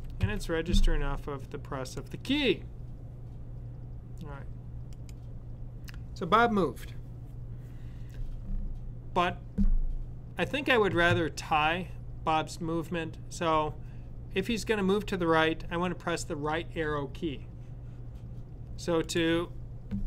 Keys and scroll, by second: 2.2-2.9 typing.